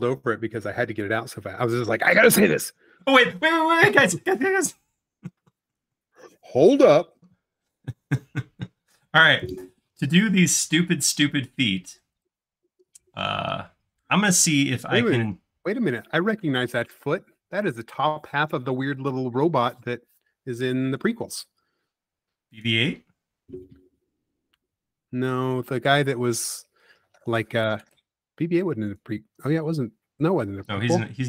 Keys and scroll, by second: 9.5 space, 14.8 c, 17.0 Right, 17.4 Left, 18.5 Up, 21.6 space, 22.0 l, 26.9 e, 28.3-28.9 typing, 30.5 s.